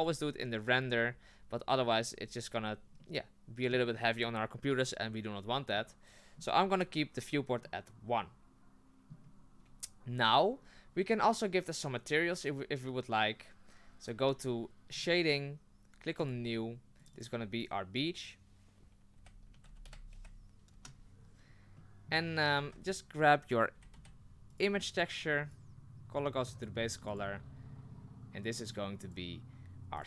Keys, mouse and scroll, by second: 3.0-10.8 middle drag, 15.0 click, 16.4 click, 26.7 click.